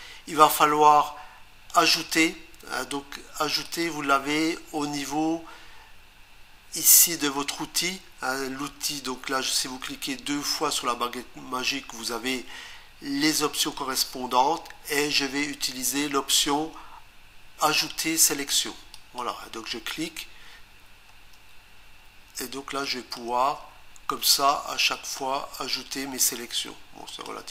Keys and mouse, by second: 3.6 click, 18.9 click, 22.8 click, 24.9 click, 26.2 click.